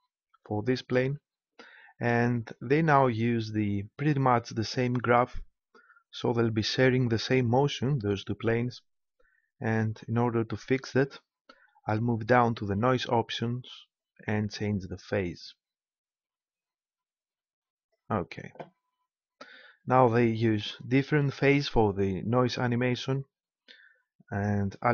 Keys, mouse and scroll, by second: 9.8 n, 11.8-13.3 drag, 13.3 middle click, 13.9-15.8 middle drag, 18.8-24.8 middle drag, 24.8 p.